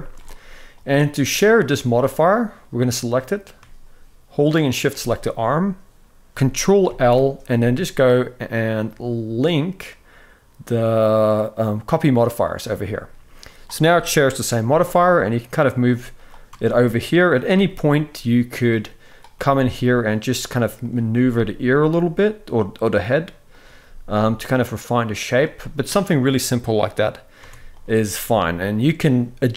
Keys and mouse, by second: 2.6-3.3 drag, 6.5 ctrl+l, 13.2 click, 13.6 shift+middle drag, 14.3 g, 15.9 click, 16.2 Tab, 16.8 click, 17.2 g, 19.0 g, 20.5 click, 20.8 g, 23.2 click, 23.5 g, 27.1 Tab, 27.4 click.